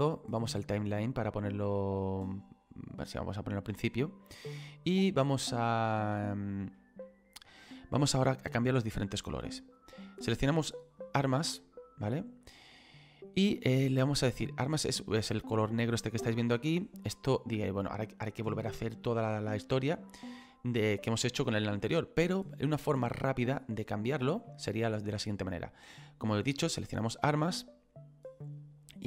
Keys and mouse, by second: 0.2 click, 2.3 click, 4.9 click, 6.7 middle click, 11.0 click, 14.6 middle click, 16.1 shift+middle click, 21.8 middle click, 22.6 shift+middle click, 24.6 shift+middle click.